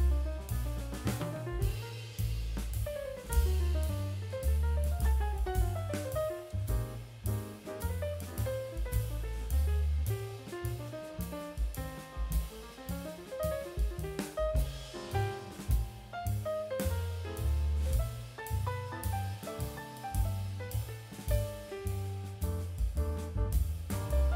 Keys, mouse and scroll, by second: 0.0 g, 1.9 Tab, 2.0-3.2 scroll down 4, 2.2 alt+z, 2.4 drag, 2.9-3.4 middle drag, 4.7 middle click, 4.9 scroll up 3, 5.2 shift+middle click, 5.9 click, 6.1 Tab, 6.4 middle click, 6.4-7.0 scroll down 2, 7.4 middle click, 7.8-8.4 scroll up 2, 8.4 middle click, 8.4 scroll up 1, 8.9 click, 9.4 KP_1, 10.1-10.5 scroll up 2, 10.8 shift+middle click, 14.4 shift+a, 15.7 s, 17.3 KP_7, 17.9 scroll down 1, 18.4 shift+middle drag, 19.1-19.5 drag, 19.7-20.1 middle drag, 20.4 middle click, 21.2 KP_1, 21.7-22.2 scroll up 2, 22.3 shift+middle drag, 23.2 click, 24.0 s.